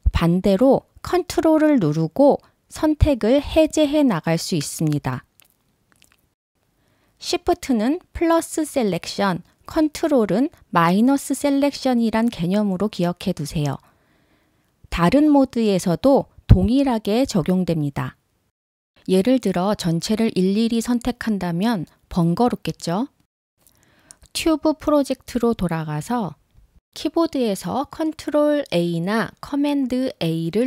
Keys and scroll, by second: 27.4 ctrl+a.